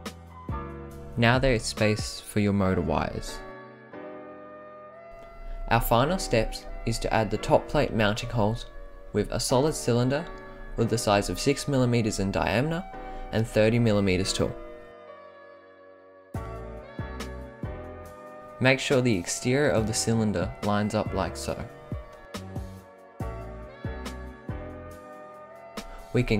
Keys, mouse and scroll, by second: 0.5-1.4 right drag, 4.3-5.6 right drag, 6.5 click, 8.1 click, 9.3-13.2 drag, 14.2-16.5 drag, 17.0-17.4 right drag, 17.7 scroll down 5, 18.3-18.8 middle drag, 19.1-19.5 scroll up 5, 19.9 click, 22.6-23.6 scroll up 5, 24.6 middle click, 25.5 ctrl+c, 25.9 ctrl+v.